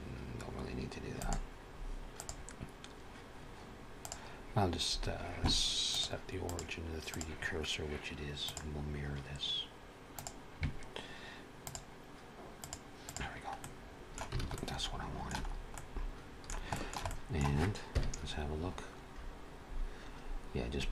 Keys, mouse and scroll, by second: 1.0 click, 3.8 click, 5.7 click, 8.3 click, 11.5 click, 12.4 click, 12.9 click, 13.4 middle click, 14.3 alt+a, 14.4 middle click, 15.3 scroll up 2, 15.6 middle click, 16.6 shift+middle click, 16.9 middle click, 17.8 KP_1, 18.5-19.2 scroll up 1, 19.2-19.6 scroll up 1.